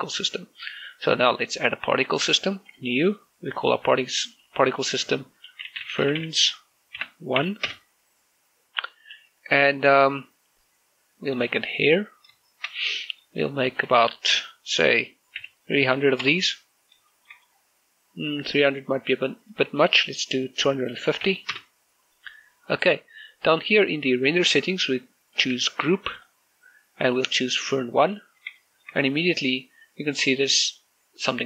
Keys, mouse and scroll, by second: 0.5 shift+middle click, 2.4 click, 6.2-8.2 typing, 8.4 Return, 12.2 click, 13.2 shift+middle click, 14.2 click, 16.2-16.8 typing, 17.0 Return, 17.6 scroll down 2, 17.9 shift+middle click, 18.2 middle click, 19.2 scroll up 1, 20.2 click, 21.4-22.0 typing, 22.3 Return, 23.2 scroll down 1, 27.0 click, 29.4 shift+middle click, 31.1-31.4 scroll up 1.